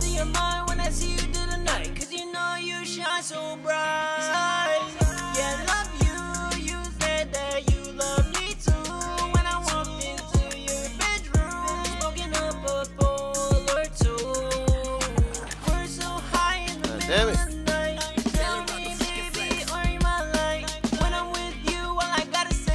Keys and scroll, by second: 1.6-3.5 typing, 6.8-9.0 typing, 12.8-14.0 typing, 16.4 typing, 19.9-22.3 typing.